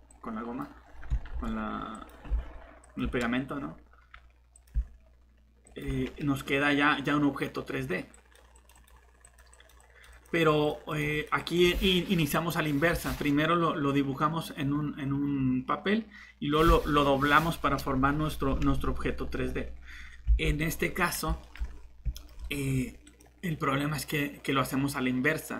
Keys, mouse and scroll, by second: 1.3 ctrl+z, 2.8 typing, 5.2 typing, 20.4 alt+Tab.